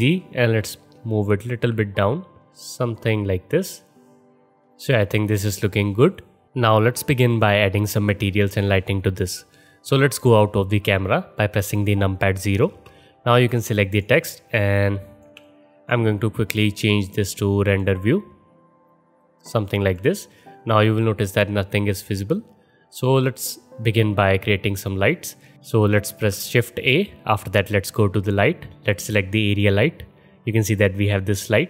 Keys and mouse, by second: 8.3-12.7 middle drag, 12.7 KP_0, 12.9-15.9 middle drag, 15.9-16.8 alt+shift+drag, 16.8-18.0 middle drag, 18.0 click, 18.1-25.3 middle drag, 25.3 click, 25.4-31.6 middle drag, 26.1 shift+a.